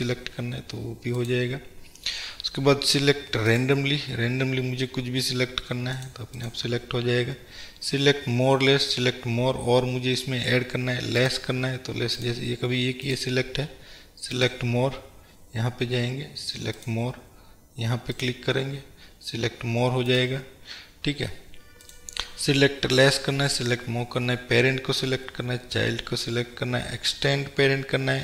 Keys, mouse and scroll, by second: 6.5-12.3 drag, 13.1 click, 14.5-18.5 drag, 20.2 drag, 22.0-28.2 drag.